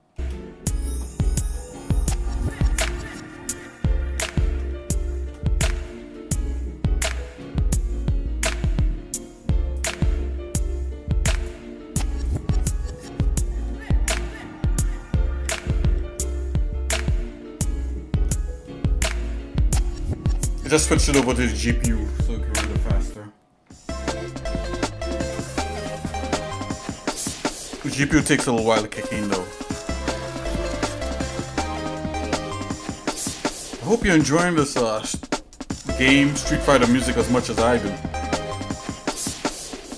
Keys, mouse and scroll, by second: 1.1 shift+middle click, 2.6 click, 3.8 shift+middle click, 5.0 shift+middle click, 5.6 Tab, 6.6 shift+middle click, 8.4 scroll down 1, 9.8 click, 11.5-12.8 drag.